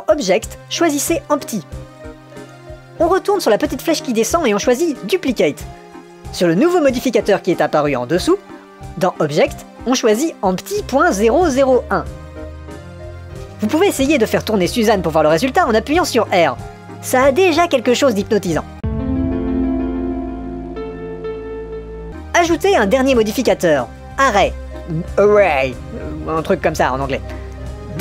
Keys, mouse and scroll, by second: 1.5-2.4 drag, 5.6-6.6 drag, 9.4-11.6 drag, 15.5 r, 18.8 r, 25.1-26.9 drag.